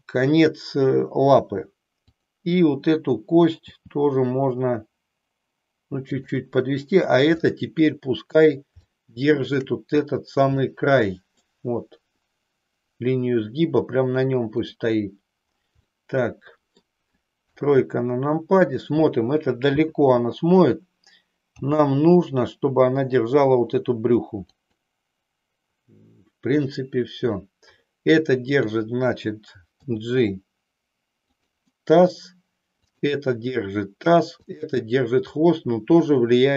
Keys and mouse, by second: 2.1 click, 3.6 g, 6.1 click, 7.4-8.6 middle drag, 8.9 shift+middle click, 10.6-11.6 middle drag, 16.0 middle click, 17.5 KP_3, 21.6 g, 24.5 click, 28.5 click, 29.9 g, 32.8 click, 34.3 click.